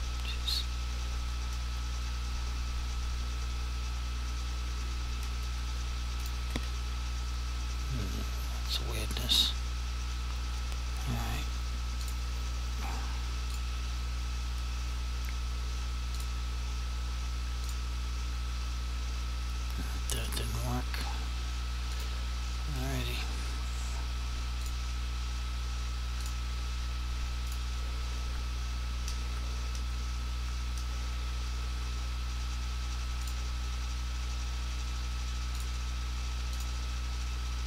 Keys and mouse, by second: 6.3 click, 6.6 f, 12.1 click, 16.3 click, 22.1 click, 24.7 click, 33.3 click.